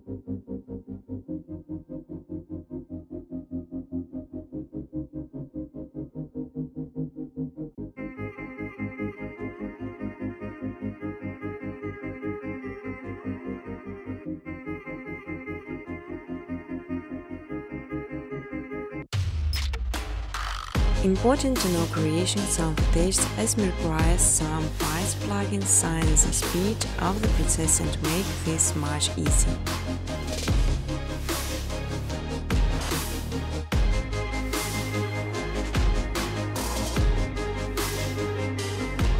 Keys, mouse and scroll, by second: 0.0-0.5 typing, 0.8 click, 1.6 click, 4.1 click, 6.6 click, 7.4 click, 8.8 click, 10.2 click, 11.7 click, 14.0 click, 20.9 click, 21.8 click, 22.2 click, 23.2 click, 25.2 click, 27.2 click, 28.3 click, 32.3 click, 32.9-39.1 typing, 34.6 Tab, 37.9 Tab.